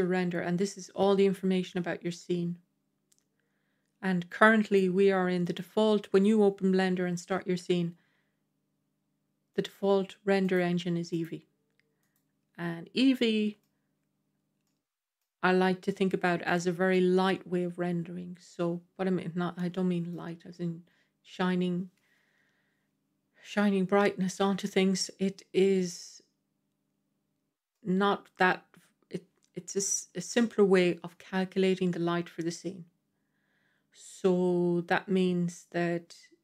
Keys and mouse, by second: 4.6 click, 9.5-10.4 drag, 11.0-11.3 drag, 12.8-13.5 middle drag, 14.5-15.0 middle drag, 16.3-16.8 middle drag, 19.6-20.0 middle drag, 24.1-25.7 middle drag, 27.6-28.1 middle drag, 30.9 middle click.